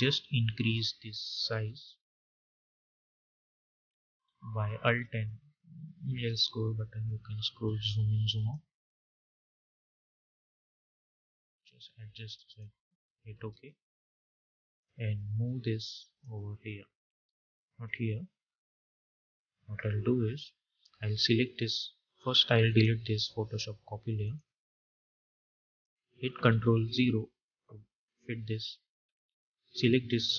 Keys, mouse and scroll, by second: 2.4-3.2 scroll down 1, 3.2-5.2 alt+scroll down 1, 8.2-13.2 drag, 13.2 Return, 14.6-17.1 drag, 17.1 ctrl+z, 21.0 ctrl+z, 22.5 click, 26.7 ctrl+0.